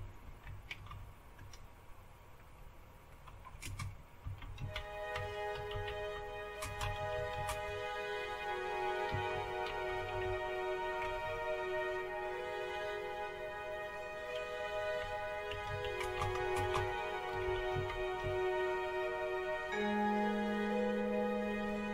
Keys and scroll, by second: 0.0-1.4 typing, 3.0-11.5 typing, 14.8-18.7 typing, 21.5 Return.